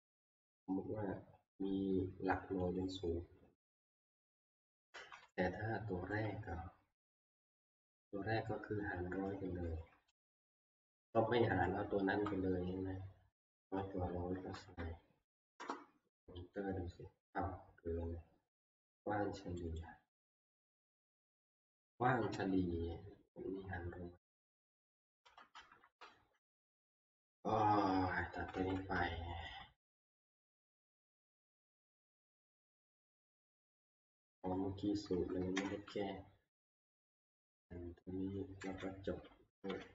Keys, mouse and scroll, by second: 2.8-7.8 drag, 5.2-6.1 Right, 11.3-12.2 Left, 13.6 Left, 14.0 Right, 14.3 Right, 14.5 Right, 14.8 Right, 15.6 Return, 19.8 click, 22.4-25.2 Right, 25.1 click, 26.0 Right, 26.5 Right, 26.6 Right, 26.7 Right, 28.3 Left, 28.5 Left, 28.8 Left, 29.4 Left, 30.5 Right, 31.0-31.4 Right, 33.4 Right, 33.6 Right, 33.8 Right, 33.9 Right, 34.1 Right, 34.4 Right, 35.1 Left, 35.5 Delete, 37.6 Down, 38.6 End, 39.7 Delete, 39.8-39.9 typing.